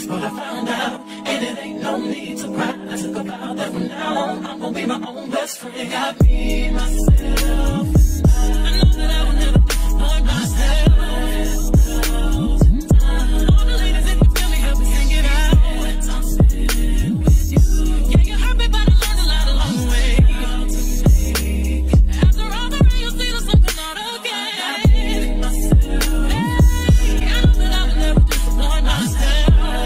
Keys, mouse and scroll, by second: 0.1 g, 1.2 click, 1.9 middle click, 2.1 g, 2.8 click, 3.9 click, 5.1-12.1 drag, 11.6 KP_1, 12.1 middle click, 12.4 g, 14.4 g, 16.5 click, 17.7-19.1 drag, 19.3-29.8 drag.